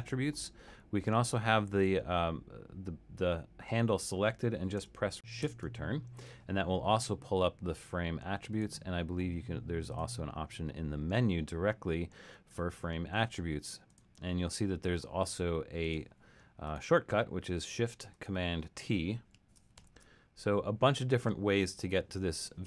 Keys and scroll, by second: 5.4 shift+Return, 19.8 shift+super+t.